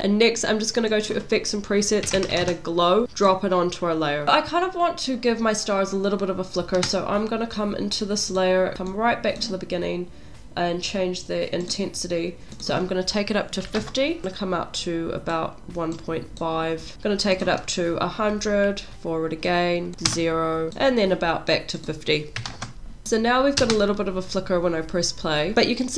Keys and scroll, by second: 3.0 w, 4.2 space, 22.8 0, 25.5 space.